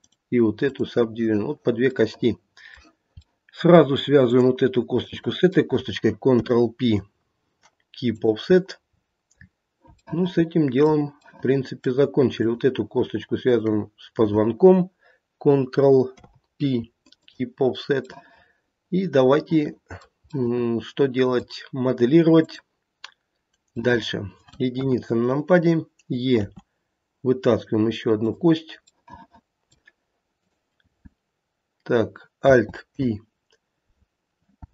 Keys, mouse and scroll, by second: 2.0 middle click, 3.6 middle click, 3.7 middle click, 4.3 click, 5.1 shift+click, 6.2 ctrl+p, 8.9-9.5 scroll down 7, 10.0 shift+middle click, 10.7 shift+middle click, 11.3 middle click, 12.3 click, 13.4 shift+click, 16.0 ctrl+p, 18.1 middle click, 18.5 middle click, 20.3 middle click, 21.2 middle click, 22.3 click, 23.8 middle click, 24.2 middle click, 24.7 KP_1, 26.4 e, 28.9 middle click, 29.2 middle click, 30.3 click, 32.8 p.